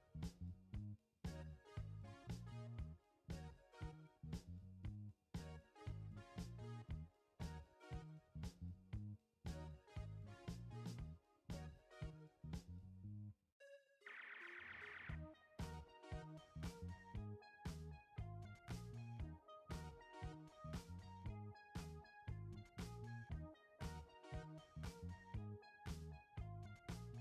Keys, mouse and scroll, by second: 0.6 ctrl+t, 4.3-23.6 alt+drag, 24.1 alt+scroll down 1, 24.6 alt+scroll up 1, 25.8 click.